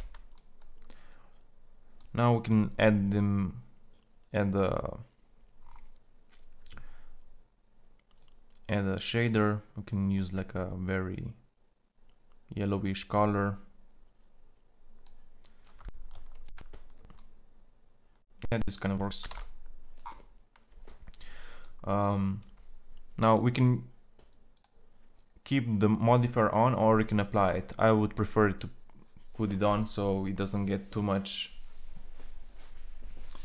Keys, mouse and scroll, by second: 15.8 shift+z, 19.1 shift+z.